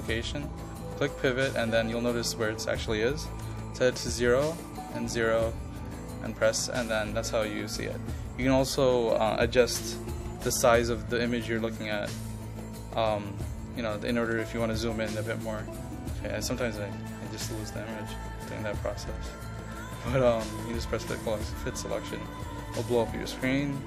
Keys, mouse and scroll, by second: 0.9 click, 3.5 KP_0, 4.7 click, 5.2 KP_0, 5.9-9.9 drag, 9.9 KP_0, 10.2 KP_Decimal, 10.4 KP_5, 10.9 click, 13.3 KP_4, 14.0 click, 14.4 KP_2, 14.8 click, 17.0 ctrl+click, 18.1 click.